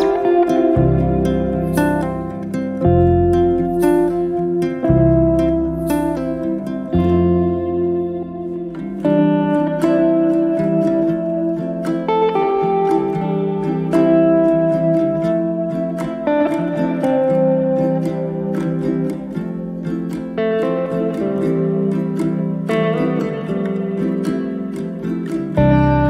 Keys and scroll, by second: 2.8 space, 8.7 p, 10.0 2, 10.5 Return, 11.1 space, 20.2 b.